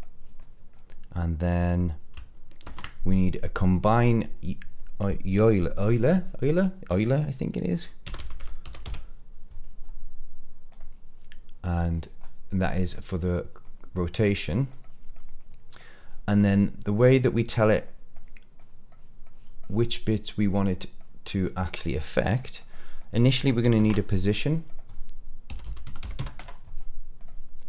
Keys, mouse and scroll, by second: 0.3 middle click, 1.1-1.6 scroll down 1, 1.6 click, 2.6 shift+a, 12.1-12.5 scroll up 2, 12.5 middle click, 13.6 middle click, 14.6 click, 15.1 click, 16.0-16.6 scroll down 3, 16.3 middle click, 16.9 click, 17.8 click, 18.5 click, 19.2 click, 20.2 click, 20.9-21.4 drag, 21.6-22.4 drag, 22.5 drag, 22.9 click, 23.7 shift+a.